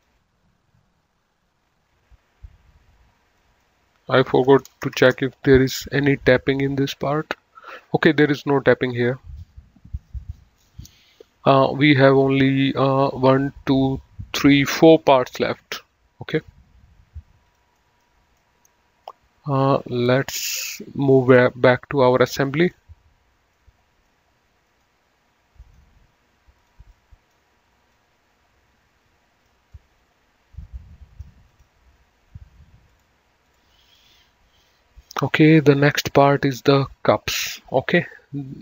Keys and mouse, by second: 1.6 click, 3.7 click, 4.7 BackSpace, 5.3 Return, 6.8 click, 11.7 click, 15.3 click, 16.6 click, 18.0 middle click, 21.4 click, 22.9 click, 23.8 middle click, 26.6 click, 27.2 middle click, 28.2 click, 30.1 middle click, 31.8 click, 33.1 click, 35.8 click.